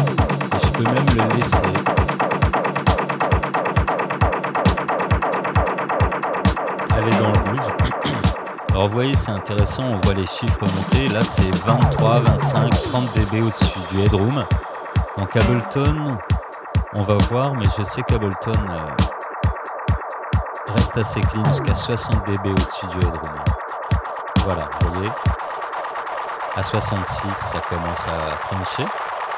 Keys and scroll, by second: 25.5 space.